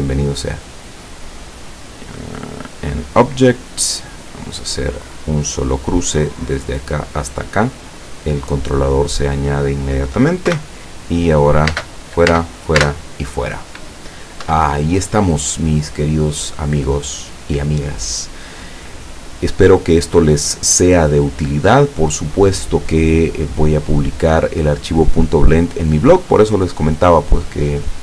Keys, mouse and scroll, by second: 1.4 click, 2.3 click, 3.0 click, 3.9 click, 6.4 click, 10.5 p, 11.7 space, 14.5 Escape.